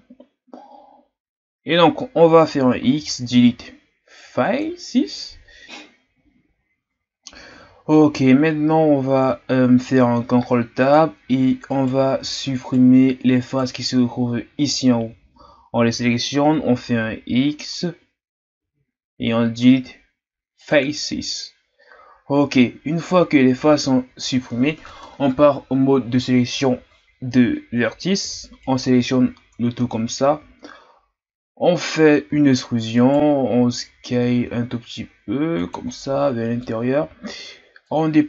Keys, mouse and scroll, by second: 2.4 x, 5.6 KP_1, 6.5-8.7 scroll down 1, 8.7-9.8 scroll up 2, 9.8 ctrl+Tab, 11.7 right click, 12.6 shift+right click, 13.5 shift+right click, 18.5 x, 21.9-22.5 scroll down 1, 22.6-23.6 scroll down 3, 23.6 ctrl+Tab, 28.6 alt+right click, 29.6-30.0 ctrl+scroll up 2, 32.3 e, 35.9 scroll down 1, 36.0 middle click, 36.8-37.2 scroll up 2, 37.8-38.2 drag.